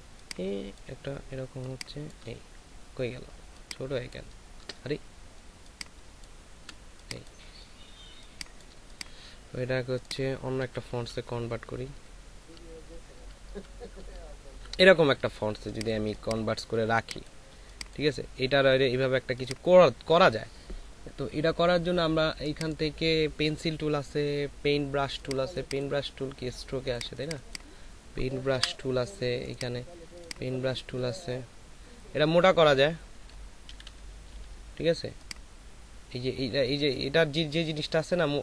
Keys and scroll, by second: 10.6 Down, 11.0 Down, 11.2 Down, 11.4 Down, 11.6 Down, 11.8 Down, 12.0 Down, 16.9 space, 28.5 Delete, 33.7-34.3 typing.